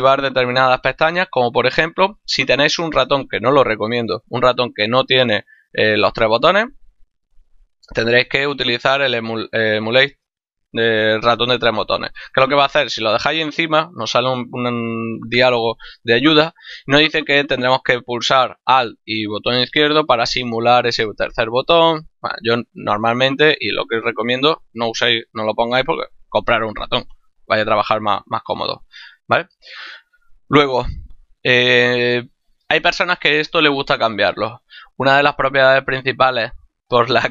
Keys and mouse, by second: 8.1 click, 22.2 click, 29.6 click.